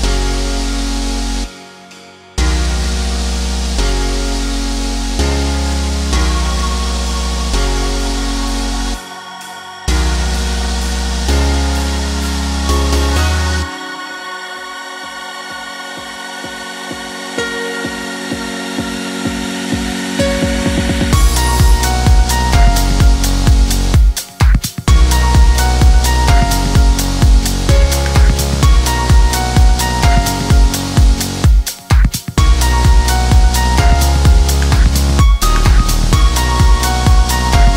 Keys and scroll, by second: 29.2 7.